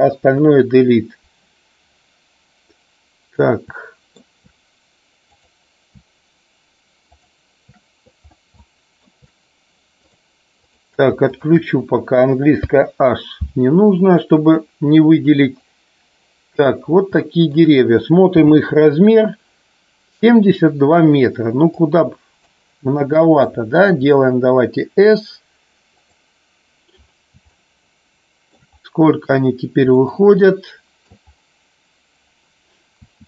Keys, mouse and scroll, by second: 1.8 Delete, 3.7-4.1 shift+middle drag, 5.2 click, 8.6 shift+middle click, 11.2 shift+click, 14.2 click, 15.6-16.7 drag, 17.1-17.6 shift+middle drag, 21.7-22.4 drag, 25.9 click, 27.5-28.6 shift+middle drag, 29.9 middle click, 30.5-31.1 middle drag, 32.9 s.